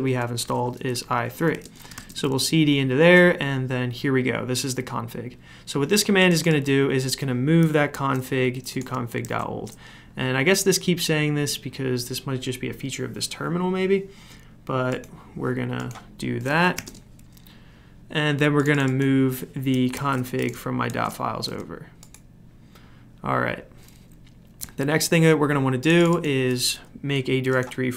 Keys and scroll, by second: 0.0-2.4 typing, 1.1 Tab, 7.9 ctrl+c, 9.2 ctrl+v, 16.5-17.2 typing, 19.9 ctrl+c, 20.9 ctrl+v, 27.8-27.9 typing.